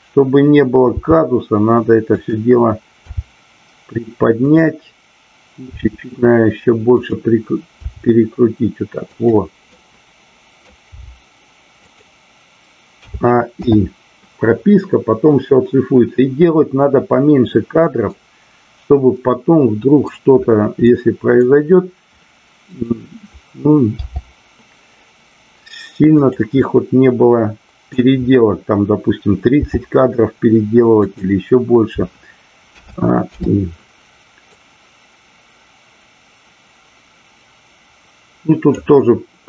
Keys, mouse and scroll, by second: 2.1 click, 4.5 click, 7.0 click, 7.7 g, 9.1 click, 9.6 middle click, 11.9 click, 13.1 a, 13.6 i, 18.0-20.0 middle drag, 20.9-21.4 middle drag, 22.6-23.6 drag, 26.2 click, 26.6-28.1 middle drag, 31.0 click, 34.5-38.7 drag.